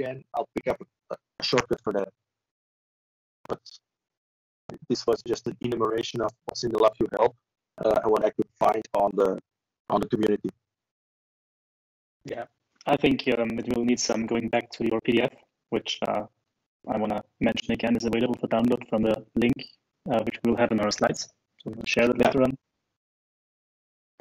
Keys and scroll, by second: 21.8 ctrl+e.